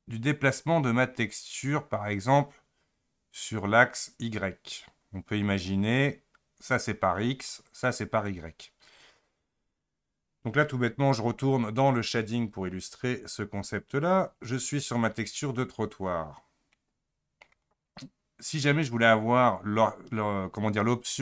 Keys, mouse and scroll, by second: 12.2 click.